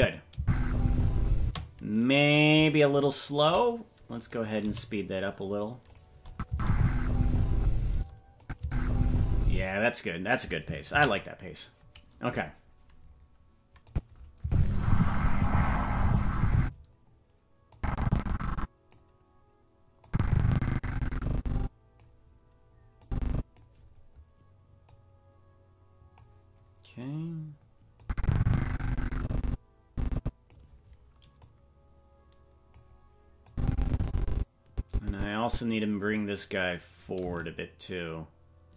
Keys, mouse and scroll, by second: 0.3 space, 1.4 space, 3.0 shift+right click, 4.2 right click, 4.6 g, 6.3 click, 6.5 space, 7.9 space, 8.4 click, 8.6 space, 9.5 space, 13.2 ctrl+s, 13.9 click, 14.4 space, 16.6 space, 17.7-18.9 drag, 20.0-22.0 drag, 23.0 click, 24.8-26.2 drag, 28.0-30.5 drag, 31.4-32.8 drag, 33.5-35.6 drag, 37.4-38.7 shift+drag.